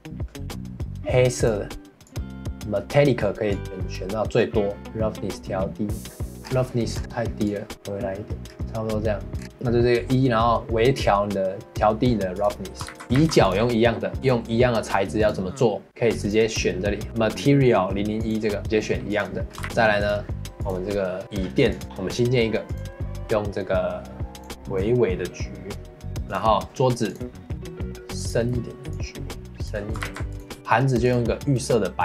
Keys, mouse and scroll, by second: 2.4-3.5 scroll down 4, 3.5-4.6 drag, 4.8-6.3 drag, 6.3 scroll down 2, 6.5 scroll up 3, 7.5-8.4 drag, 12.9 ctrl+s, 13.0 click, 13.2 ctrl+s, 14.2 click, 15.2 click, 16.2 click, 19.1 click, 19.5 scroll down 2, 19.6 shift+middle click, 20.0 click, 20.6 click, 21.7 click, 21.8-22.8 drag, 26.1 ctrl+s, 26.3 click, 27.1-27.5 drag, 30.0 ctrl+s, 31.0-32.0 drag.